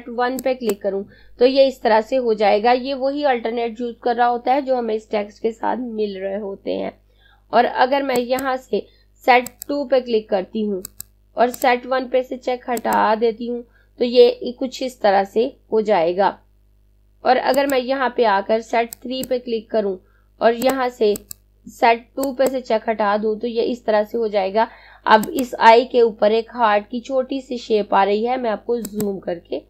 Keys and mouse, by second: 0.3 click, 7.8 click, 16.8 click, 24.2 click, 27.8 click.